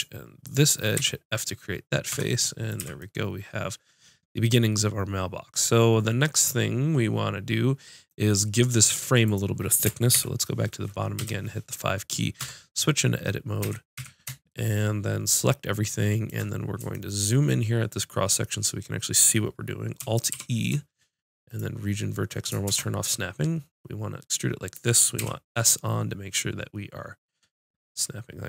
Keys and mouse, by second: 1.0 f, 2.1 Tab, 2.8 z, 9.3 click, 10.1 ctrl+KP_7, 11.2 KP_5, 12.4 Tab, 13.6 a, 14.0 a, 20.3 alt+e.